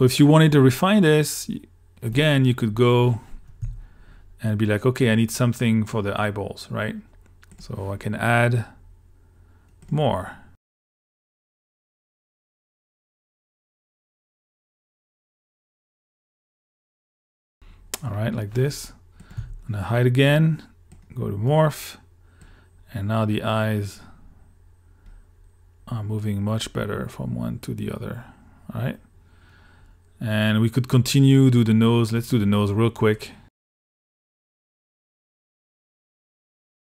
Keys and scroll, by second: 3.7 q, 10.5 super+s, 19.4 q, 33.6 q.